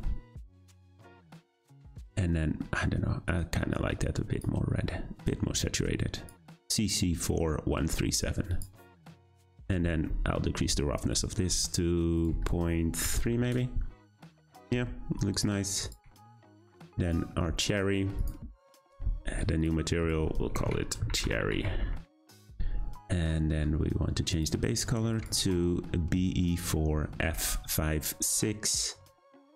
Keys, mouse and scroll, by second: 8.6 click, 13.4-17.1 drag, 18.2-22.1 drag, 22.1 r, 23.4-27.4 middle drag.